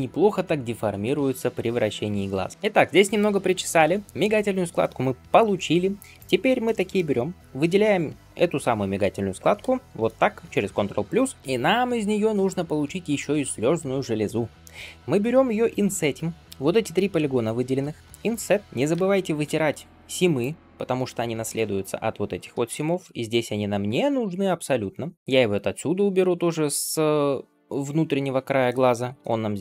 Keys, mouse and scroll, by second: 2.5 shift+middle click, 2.5-3.8 scroll down 1, 3.8 scroll up 1, 5.4-6.0 scroll up 2, 6.0 click, 6.4 shift+scroll up 1, 6.5 shift+middle click, 6.8-9.3 middle drag, 9.8 ctrl+KP_Add, 19.3 ctrl+e, 22.3 scroll down 1, 22.6 shift+middle click, 24.0 alt+click, 25.1 middle click, 25.1 scroll down 2, 25.8 scroll up 2, 26.1-28.6 middle drag, 28.8 ctrl+e.